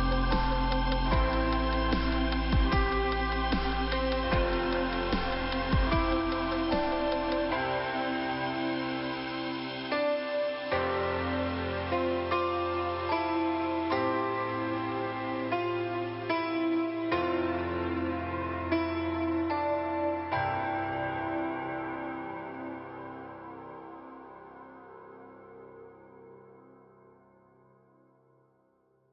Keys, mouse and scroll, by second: 1.1 click, 3.0 click, 3.9 click, 6.0 click, 7.8 click, 12.1 click, 13.3-13.9 scroll up 2, 14.2 middle click, 15.2 click, 17.9 click, 18.0 click, 22.9 click, 24.4 middle click, 27.9 click.